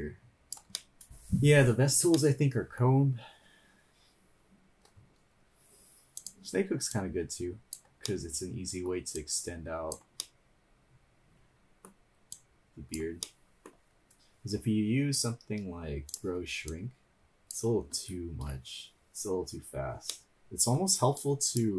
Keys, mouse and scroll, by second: 0.8 middle click, 0.8 scroll up 1, 2.1 middle click, 3.0 scroll up 2, 5.0 scroll down 2, 6.2 click, 6.9-8.0 drag, 8.0 middle click, 9.1-10.2 drag, 10.2-11.9 middle drag, 12.4-13.2 drag, 13.3 middle click, 13.7-14.3 scroll down 1, 16.1 click, 16.7-17.8 drag, 18.1 ctrl+z, 20.1 middle click, 20.3 click, 21.3 click.